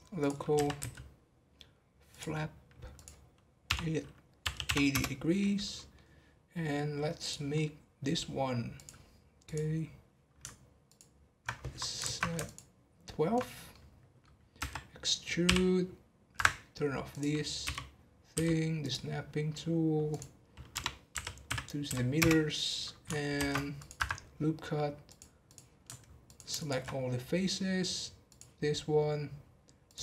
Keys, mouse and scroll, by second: 0.5 r, 2.9-5.5 drag, 5.5 scroll up 1, 5.7-7.2 middle drag, 7.2 click, 7.5 scroll up 2, 8.7 click, 9.8-10.8 scroll up 1, 10.8 ctrl+click, 12.0 ctrl+z, 12.4 ctrl+click, 13.7-14.6 middle drag, 14.6 e, 17.1 click, 20.1-23.1 drag, 23.3 ctrl+r, 25.0-26.3 drag, 26.5 alt+shift+click, 28.2-29.9 drag.